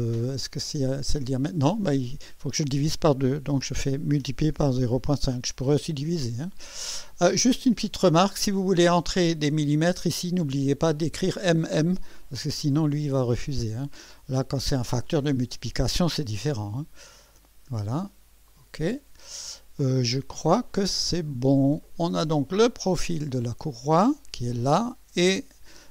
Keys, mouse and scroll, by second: 4.1-5.2 typing, 17.2 click, 18.5 click, 21.8 click, 23.3-24.2 drag.